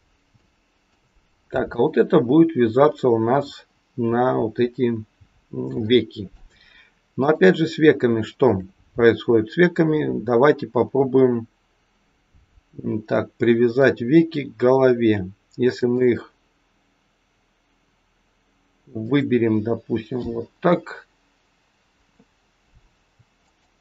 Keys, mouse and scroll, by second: 0.3 shift+middle click, 1.7 click, 5.8 shift+middle click, 7.1 click, 8.2 shift+click, 15.7 shift+click, 18.9 click, 23.3 shift+click.